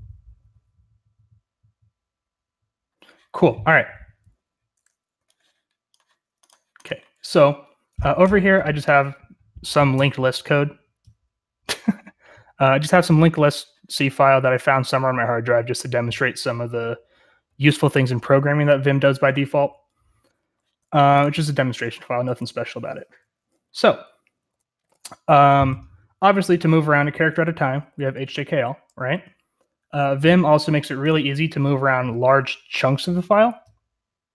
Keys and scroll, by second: 23.5-24.7 j, 24.8 j, 26.7-29.5 typing.